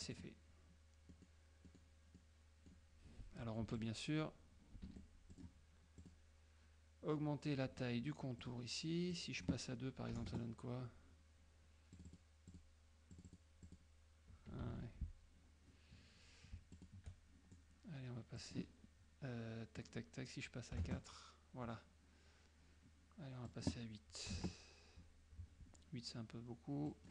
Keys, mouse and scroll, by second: 0.1 click, 1.2 middle click, 1.7 middle click, 2.3 middle click, 3.7 F2, 3.9 click, 5.1 F1, 5.4 click, 6.1 click, 8.5 click, 9.2 click, 10.2 KP_2, 12.0 click, 12.6 click, 13.2 click, 13.7 click, 14.7 ctrl+a, 16.9 shift+click, 18.5 click, 20.9 KP_4, 23.6 click, 24.4 KP_8, 27.0 click.